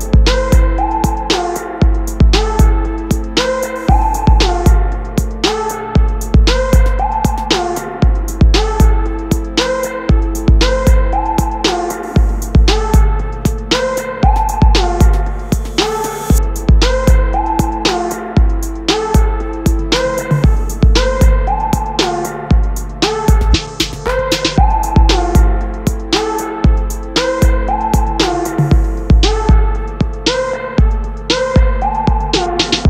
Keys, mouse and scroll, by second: 9.5-11.0 drag, 13.0 click, 16.0-17.5 drag, 18.3 click, 21.4-32.8 drag.